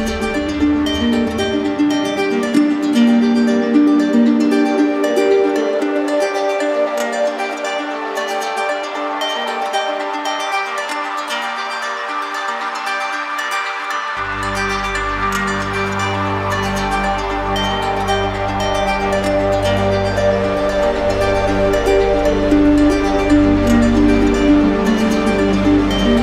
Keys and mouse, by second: 1.1 click, 1.9 shift+click, 3.0 click, 3.5-4.5 drag, 5.5-7.3 drag, 8.4-9.5 drag, 9.8-10.9 drag, 12.5 q, 13.8 click, 15.1 z, 16.0 click, 17.4 click, 18.9 right click, 21.5 click, 23.3 click, 24.2 click, 25.3 click.